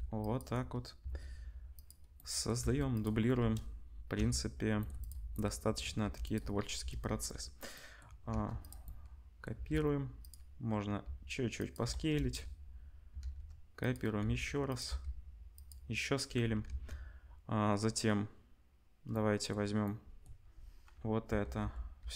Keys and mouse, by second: 1.0 shift+d, 2.1 middle click, 2.6 g, 3.3 KP_0, 4.1 g, 5.3 middle click, 6.0 g, 6.7 KP_0, 8.3 shift+d, 8.5-12.2 middle drag, 9.5 g, 11.0 s, 12.1 KP_0, 12.2 middle click, 12.9 middle click, 13.2 shift+d, 14.2 s, 14.8 g, 16.7 ctrl+s, 21.2 l, 21.6 l, 22.0 l.